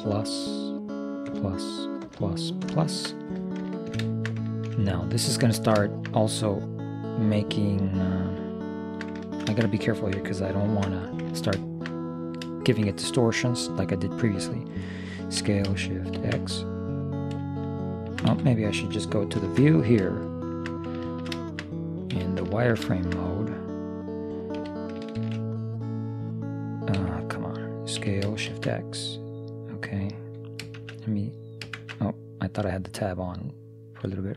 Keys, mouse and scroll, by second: 0.1 ctrl+KP_Add, 1.4 ctrl+KP_Add, 6.1-8.2 middle drag, 8.8-11.0 middle drag, 10.7 ctrl+,, 11.5-14.4 middle drag, 15.4 s, 19.5 ctrl+KP_3, 20.3 middle click, 22.2 z, 24.6 s, 28.0 s.